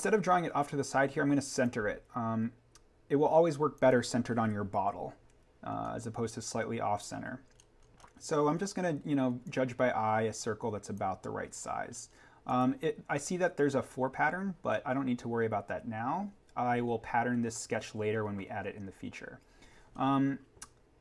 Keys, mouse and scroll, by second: 1.5 click, 5.3 Escape, 5.5 scroll down 1, 7.6-8.0 scroll up 1, 9.4 click, 11.9 scroll up 1, 12.4 click, 14.7-16.5 scroll up 1, 16.8-18.7 scroll down 1, 19.7 scroll down 1.